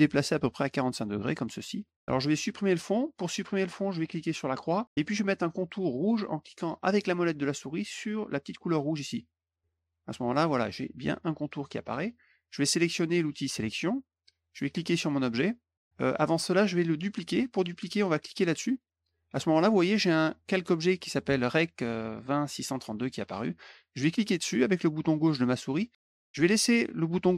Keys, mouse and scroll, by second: 4.4 click, 8.7 middle click, 13.7 click, 18.5 click, 24.3-27.3 drag.